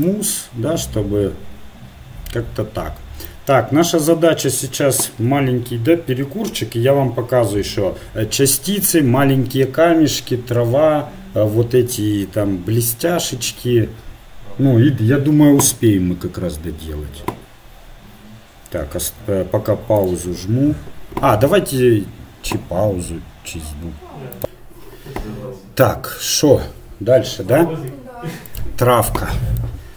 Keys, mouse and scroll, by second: 29.6-29.9 middle drag.